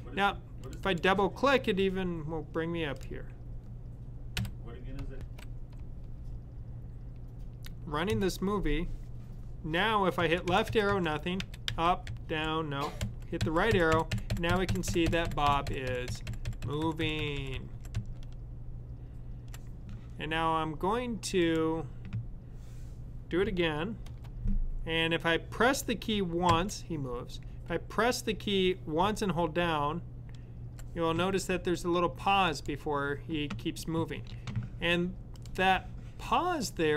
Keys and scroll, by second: 4.2 =, 10.1 Left, 10.6 Left, 10.8 Left, 11.3 Up, 11.5 Up, 11.9 Down, 12.9 Right, 13.2-14.0 Right, 13.8 Right, 14.2 Right, 14.4 Right, 14.5 Right, 14.7 Right, 15.1-15.7 typing, 26.4 Right, 29.4-30.4 typing.